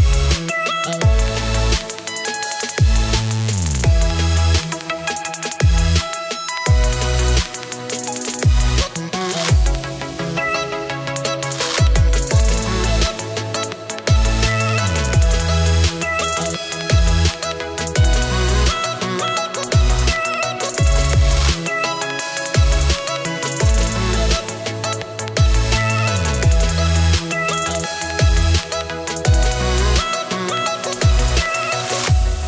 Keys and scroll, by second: 2.3 space, 6.6 space, 7.0 -, 7.1 space, 9.3 space, 12.3 space, 14.7 space, 15.9 space, 16.4 space, 17.0 space, 21.7 space, 23.7 space, 24.8-27.4 typing, 28.6 space, 29.2 space, 30.4-32.4 typing.